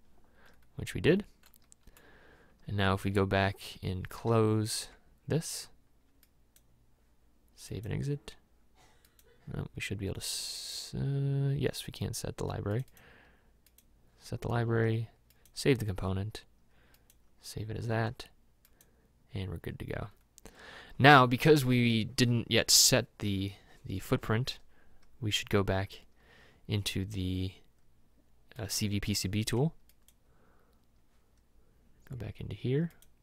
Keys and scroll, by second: 4.1 alt+Tab.